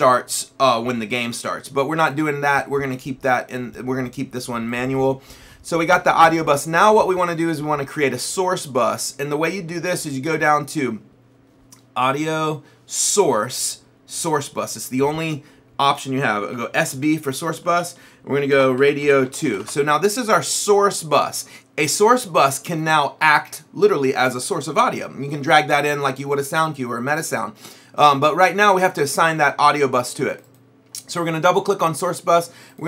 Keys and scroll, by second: 16.4-20.0 typing.